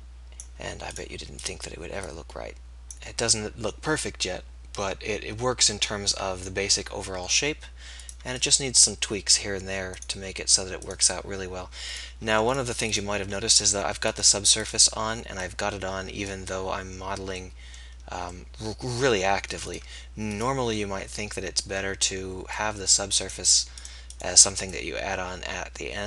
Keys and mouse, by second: 1.0-4.2 middle drag, 10.1-24.8 middle drag, 24.8-26.0 drag.